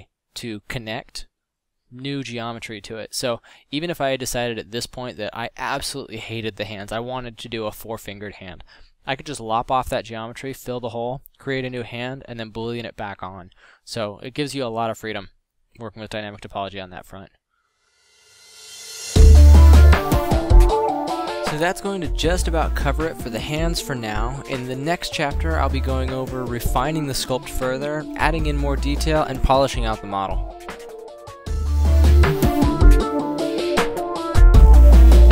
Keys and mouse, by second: 4.0 f, 4.2 f, 8.4 f, 15.3 middle drag, 16.9 f, 18.7 f, 22.7 f, 24.0 middle drag, 25.7 d, 26.9-27.3 drag, 27.6-28.4 drag, 29.2 drag, 30.1 f.